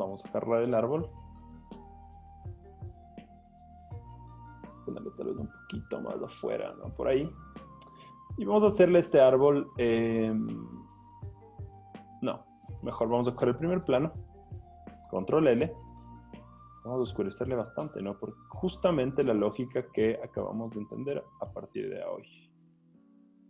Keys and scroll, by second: 0.3 z, 2.0 v, 8.0 z, 14.0 z, 15.2 super+l.